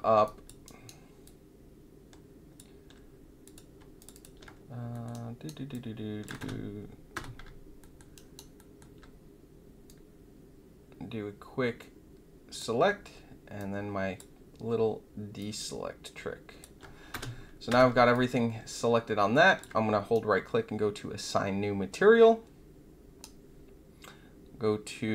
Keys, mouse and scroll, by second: 0.2 alt+click, 0.6 alt+right click, 1.2-2.5 alt+drag, 3.4 click, 3.9 shift+click, 4.1 shift+click, 4.9 alt+middle click, 5.1 alt+right click, 5.7 alt+click, 6.3 space, 7.1 space, 7.8 alt+middle click, 8.1 alt+click, 8.5 alt+middle click, 9.8-12.5 drag, 13.5-14.1 shift+drag, 15.3-16.6 shift+drag, 17.1 space, 17.6 space, 18.1-19.6 alt+drag, 20.1-23.2 right drag.